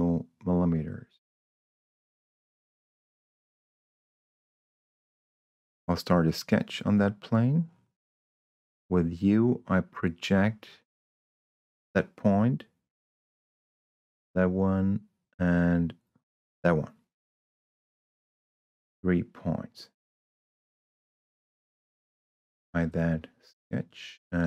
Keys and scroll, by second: 5.4 s, 8.5 u.